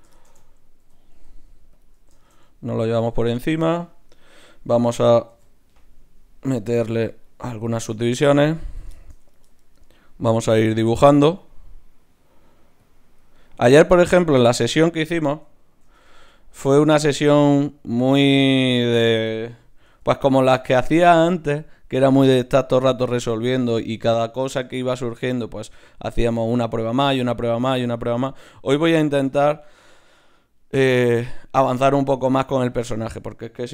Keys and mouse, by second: 0.8 e, 5.3 ctrl+r, 7.5-10.2 drag, 8.0-10.6 right drag, 10.6 d, 11.3-13.9 drag, 14.7-17.2 middle drag, 15.8 shift+q, 18.4-20.6 drag, 19.8 g, 20.6 middle click, 22.1-24.6 right drag, 24.6-31.5 middle drag, 32.2 ctrl+Tab, 33.0-33.7 drag.